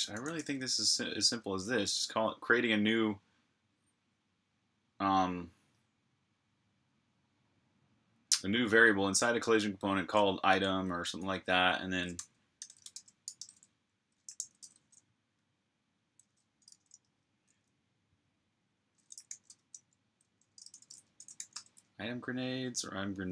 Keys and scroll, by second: 0.0-0.7 typing, 2.8 typing, 11.8-14.6 typing, 16.3-17.0 typing, 18.9-21.7 typing.